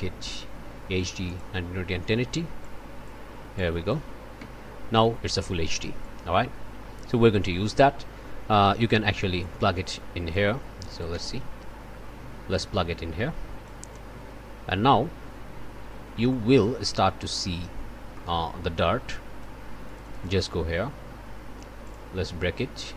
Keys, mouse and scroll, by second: 1.2-1.6 scroll up 1, 2.6-3.2 scroll up 1, 3.5-4.1 scroll up 1, 4.4 1, 9.4-10.5 drag, 10.9 click, 11.1 1, 12.5-13.8 drag, 16.3 click, 17.5 scroll up 1, 17.8 middle click, 18.1 click, 19.1 click, 19.8 click, 21.8 click.